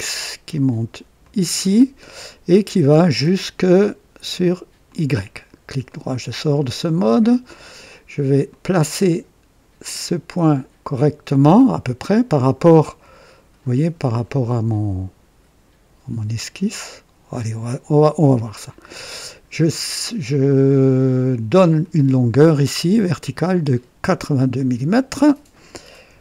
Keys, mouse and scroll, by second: 1.2 click, 4.9 click, 5.9 right click, 6.8 right click, 8.4-18.4 drag, 19.0 click, 21.5 click, 24.1 click, 26.1 KP_8.